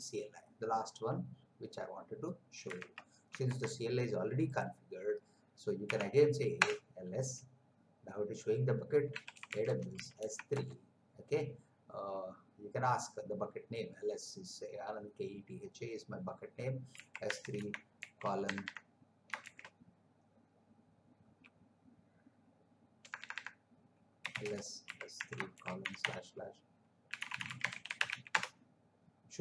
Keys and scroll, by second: 2.9 alt+Tab, 5.8 Up, 6.5 Return, 9.1-10.5 typing, 16.9 s, 17.6 shift+/, 17.9 shift+;, 18.4 BackSpace, 19.4 shift+;, 23.0 BackSpace, 24.2-25.8 typing, 27.1-28.1 typing, 28.3 Return.